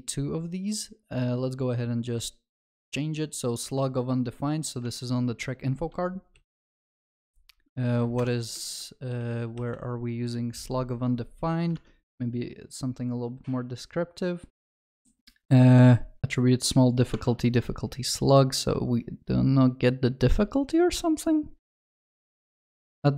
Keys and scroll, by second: 6.4 ctrl+shift+n, 8.7 ctrl+f.